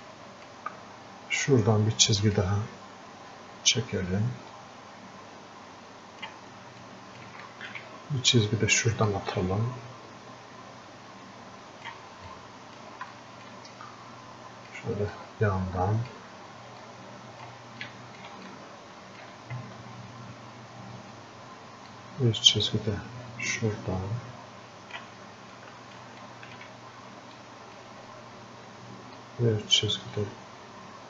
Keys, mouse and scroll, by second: 12.9 typing, 18.1-31.0 shift+drag.